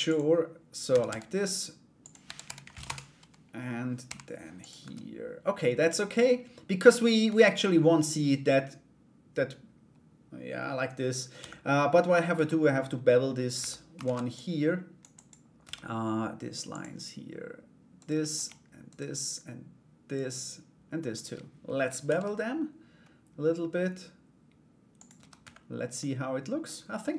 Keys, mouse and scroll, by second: 0.5 a, 0.6 s, 1.8 r, 3.6 g, 4.4 Tab, 6.8 /, 7.4-10.9 middle drag, 11.5 middle click, 11.5 /, 11.9 Tab, 13.6 ctrl+a, 15.2 Tab, 16.3 click, 17.5 right click, 18.4 shift+right click, 19.7 shift+right click, 20.7 shift+right click, 21.6 ctrl+b, 24.7 Tab, 25.0 /, 25.5 middle click, 27.1 Tab.